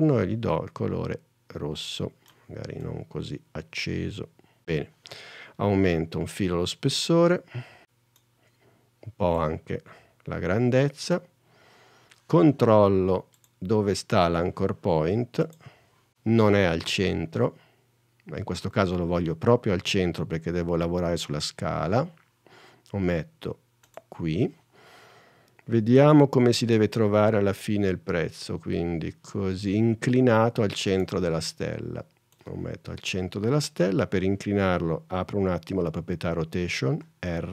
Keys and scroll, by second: 37.1 r.